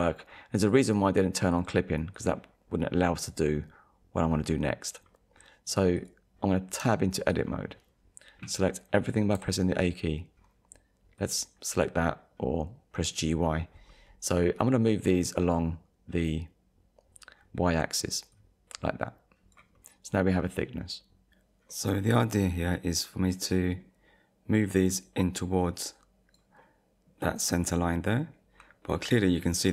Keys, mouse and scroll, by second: 0.7 click, 1.5 click, 2.1 click, 5.4 middle click, 6.0 click, 6.8 Tab, 7.3 click, 9.3 a, 11.2 click, 13.9 middle click, 18.3 click, 19.7 middle click, 21.7 middle click, 23.2 middle click, 24.7 click, 26.6 middle click, 27.7 middle click, 28.9 middle click, 29.5 scroll up 1.